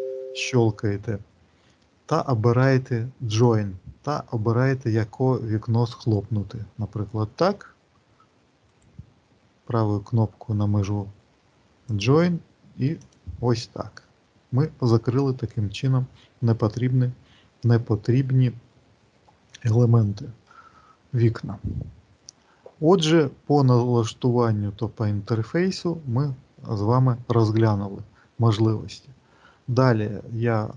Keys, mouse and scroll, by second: 8.5 right click, 30.6 click.